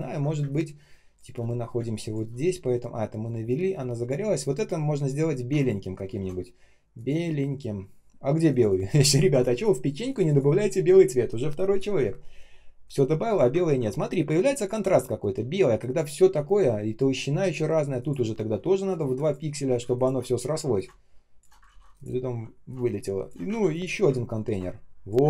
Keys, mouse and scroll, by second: 0.3 space, 0.8 space, 0.8 space, 3.7 space, 4.3 ctrl+scroll up 1, 6.0 shift+ч, 13.5-14.6 ctrl+scroll down 1, 16.4-16.7 ctrl+scroll up 1, 17.9 ctrl+click, 18.9 typing, 19.9 ctrl+click, 21.6 ctrl+я, 21.9 shift+Return, 22.6 alt+click, 23.4 ctrl+я, 23.7 shift+Return, 24.4 alt+click.